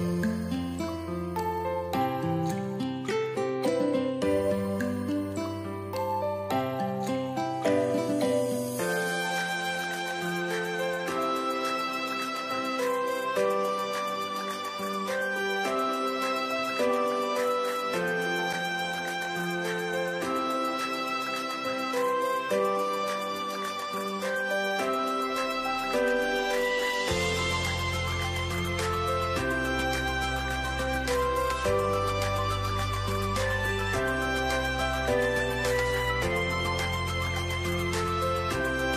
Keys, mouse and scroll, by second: 25.8-27.9 scroll down 1, 30.9-33.3 scroll down 1, 35.4 ., 35.4 2, 35.6 5, 35.7 Return.